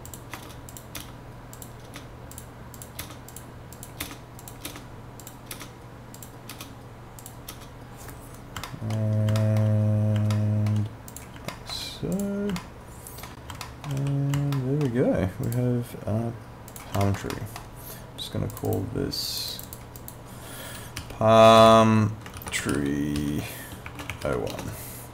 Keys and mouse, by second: 0.1 click, 0.4 Return, 0.7 click, 0.9 Return, 1.5 click, 1.8 Return, 2.4 click, 3.0 Return, 3.3 click, 4.0 Return, 4.4 click, 4.7 Return, 5.2 click, 5.5 Return, 6.2 click, 6.5 Return, 7.2 click, 7.5 Return, 8.7 alt+middle click, 9.4 alt+middle click, 10.3 alt+middle click, 11.1 click, 11.5 alt+middle click, 12.1 click, 12.6 alt+middle click, 13.6 alt+middle click, 14.0 w, 14.6 alt+middle click, 15.8 click, 17.3 middle click, 18.5 click, 21.0-24.8 typing.